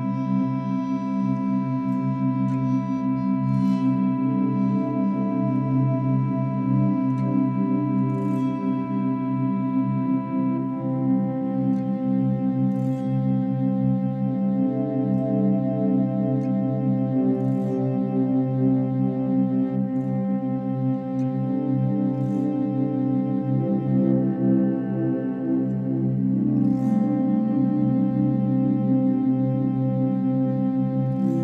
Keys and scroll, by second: 2.1 ctrl+=, 2.2 ctrl+-, 2.7 ctrl+=, 6.3 ctrl+-, 8.3 ctrl+=, 8.6 ctrl+=, 10.3 space, 10.4 ctrl+-, 10.9 space, 20.9 ctrl+alt+shift+n, 21.3 ctrl+=, 21.6 space.